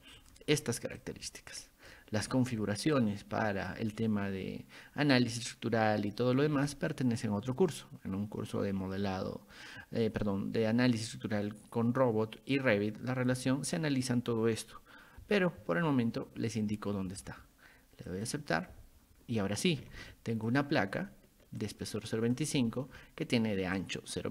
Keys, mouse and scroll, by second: 0.2 click, 1.0-1.9 ctrl+drag, 3.0-3.7 drag, 6.7 ctrl+click, 18.1 click, 20.0 ctrl+1, 20.5 click, 21.6-22.4 ctrl+drag, 23.8 ctrl+click.